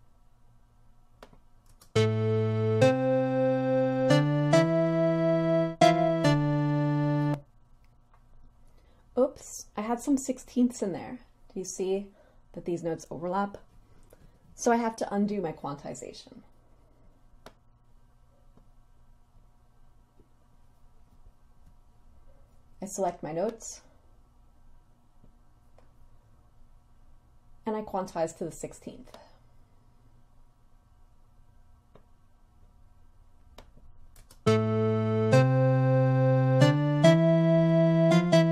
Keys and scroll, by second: 1.8 space, 7.3 space, 34.3 space.